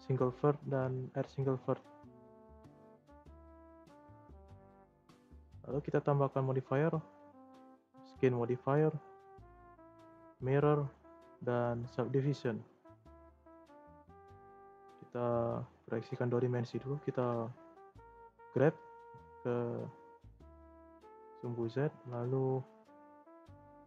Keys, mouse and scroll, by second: 2.3 scroll up 1, 2.4 shift+middle click, 2.8-3.2 scroll up 3, 3.2 Tab, 4.3 Tab, 5.8-13.2 drag, 13.2 Tab, 13.5 scroll down 2, 13.7-15.3 middle drag, 15.3 click, 15.9 shift+scroll up 1, 16.0-17.0 shift+middle drag, 17.0 g, 20.6-21.0 shift+middle drag, 21.0 scroll up 2, 21.7 shift+middle click, 22.6 scroll down 2, 22.9-23.8 shift+middle drag.